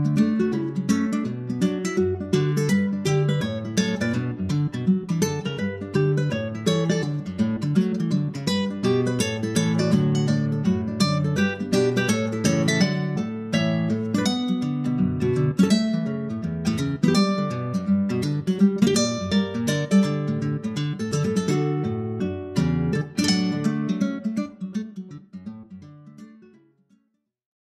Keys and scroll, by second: 2.5 super+Tab, 2.9 super+Tab, 5.5 super+Tab, 5.9 super+Tab, 6.0 super+Tab, 11.9 super+s, 12.0 super+Tab, 14.6 super+Tab, 18.2 super+s, 18.3 super+Tab.